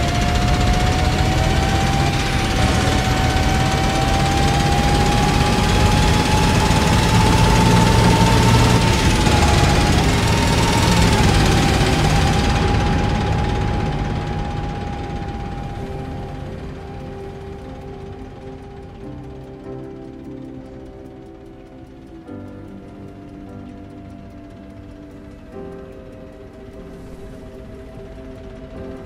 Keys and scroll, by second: 1.9 e, 8.6 e, 12.3 a, 17.3 a, 21.8-23.0 typing, 26.5 d, 27.7 d.